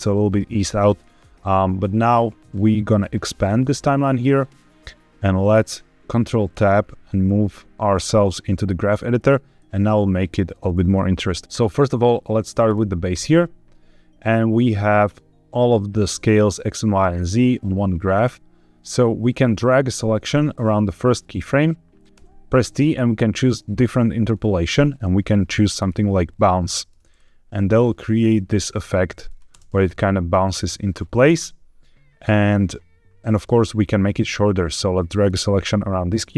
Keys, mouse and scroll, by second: 0.5 middle click, 3.3-5.4 drag, 6.4 ctrl+Tab, 8.8-9.4 scroll down 3, 9.4 middle click, 12.5 click, 14.8 click, 18.7 click, 19.3-20.9 drag, 22.0 t, 27.0-29.4 drag, 29.4 space, 31.1 space, 33.2-35.2 drag.